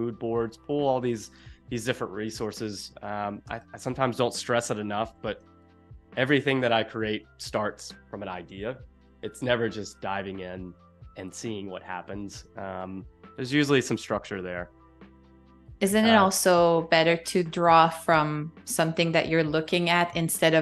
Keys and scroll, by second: 3.5 space, 5.0 super+=, 5.5 space, 13.5 space, 17.7 space.